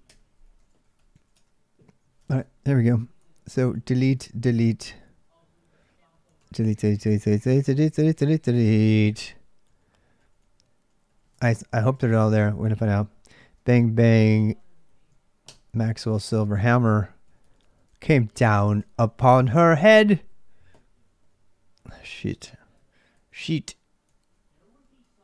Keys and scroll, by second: 0.0-13.0 typing, 2.0 ctrl+[, 12.1 ctrl+[, 14.4 p, 14.5 p, 15.2 Return, 16.0 ctrl+[, 16.0-23.1 typing, 21.8 ctrl+[, 21.8 ctrl+j, 24.1 j, 25.1 l.